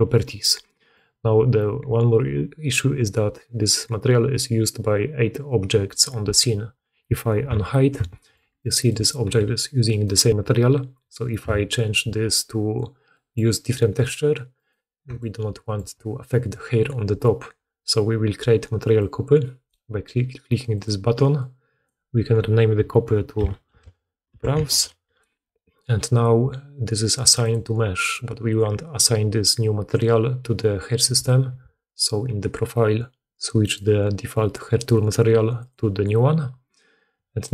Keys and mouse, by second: 7.3 alt+h, 9.1 g, 11.3 h, 14.5 click, 14.5 middle click, 14.5 right click, 15.0-27.4 shift+drag, 27.4-33.5 middle drag, 31.0 a, 31.4 a, 33.5-37.5 drag.